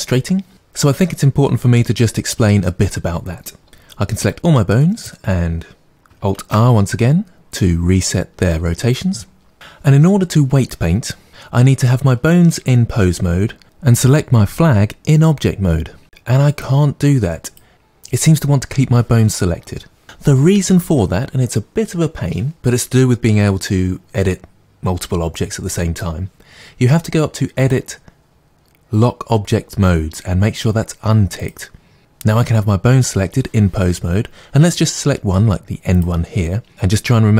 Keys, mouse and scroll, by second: 4.3-5.0 drag, 6.3 alt+r, 14.7 click, 16.5 click, 27.5-32.0 drag, 35.9-37.1 drag.